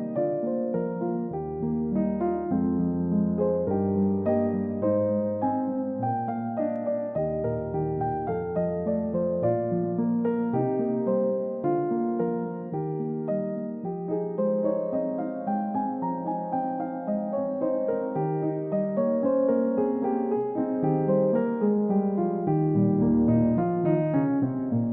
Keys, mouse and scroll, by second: 0.7-1.2 scroll down 1, 1.4 double click, 1.7 scroll down 1, 3.0-3.5 scroll down 1, 10.0-10.5 scroll down 1, 10.5 scroll up 1, 11.1 double click, 11.4-11.9 scroll down 1, 12.3 space, 15.4-16.2 scroll up 1, 17.4 scroll down 1, 19.2 scroll up 1, 20.5-22.2 scroll down 1, 22.5 alt+click, 22.9 scroll up 1, 23.2 alt+middle click, 23.7-24.3 alt+scroll up 1, 24.7 middle click.